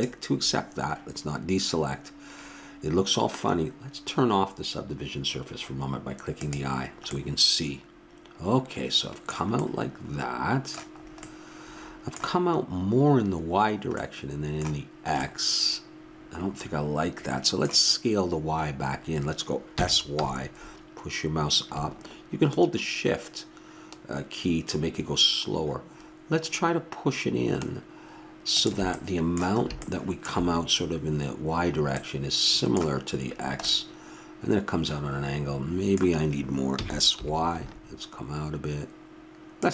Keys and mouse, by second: 6.4-8.2 drag, 7.1-8.4 middle drag, 8.5-11.0 middle drag, 14.6 middle click, 15.5-17.2 middle drag, 19.7 s, 29.6-36.8 middle drag, 36.8 s.